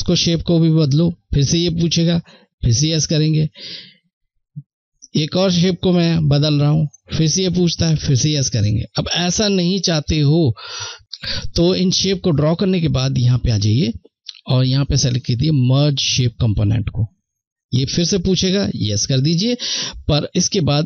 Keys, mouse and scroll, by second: 9.0 ctrl+z, 12.9 click, 16.3 click.